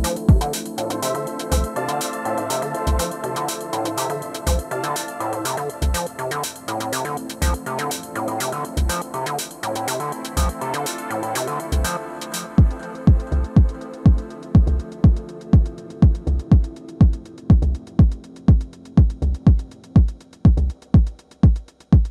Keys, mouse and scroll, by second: 0.9-2.8 scroll up 1, 3.4-5.7 scroll down 1, 5.7-7.6 drag, 12.3-14.3 middle drag, 15.4 alt+w, 17.2 f, 20.1-22.0 drag.